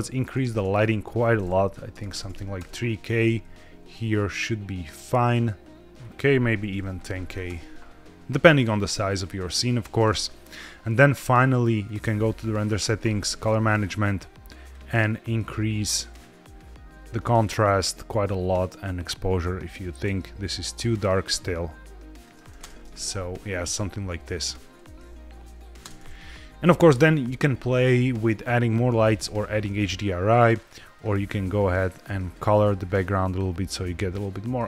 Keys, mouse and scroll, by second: 0.3 ctrl+z, 1.0-2.6 drag, 2.0 KP_0, 2.1 KP_0, 3.4 g, 3.5 z, 3.7 z, 5.9-7.4 drag, 6.8 KP_0, 6.9 KP_0, 11.7 click, 12.1-13.2 scroll down 3, 13.2 click, 13.5-14.5 scroll down 2, 14.5 click, 16.0-17.4 drag, 18.5-22.2 drag, 22.5 space, 25.7 space, 30.2 click, 30.8-33.8 drag.